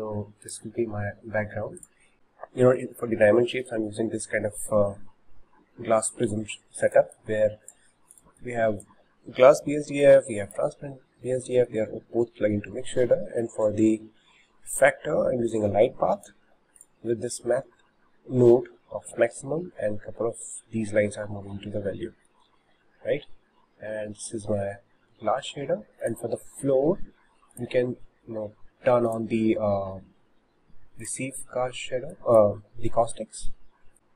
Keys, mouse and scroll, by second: 0.7 click, 1.8 click, 2.1 shift+middle click, 3.0 scroll up 1, 3.6-7.2 shift+middle drag, 7.2 drag, 8.2 click, 11.3-16.9 shift+middle drag, 16.9-22.7 drag, 22.0-26.0 shift+middle drag, 26.0 click, 27.5 click, 29.1-31.2 drag, 32.1-33.9 drag.